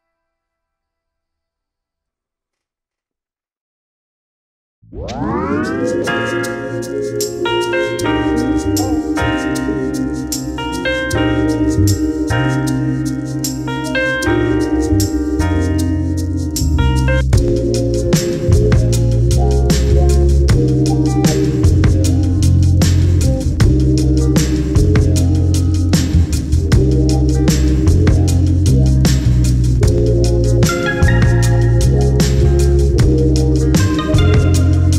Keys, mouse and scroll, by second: 2.1-4.4 drag, 2.4-3.7 scroll down 1, 3.7 shift+d, 4.4 KP_Divide, 4.9 KP_7, 6.0 Tab, 6.4 scroll up 1, 8.3 3, 9.9 c, 18.0 shift+right click, 18.2 shift+click, 20.9 ctrl+click, 21.6 `, 22.7 scroll up 2, 23.5 `, 24.5 shift+click, 24.9 `, 26.5 scroll up 2, 26.7 `, 29.0 ctrl+i, 30.6 x, 30.8 `.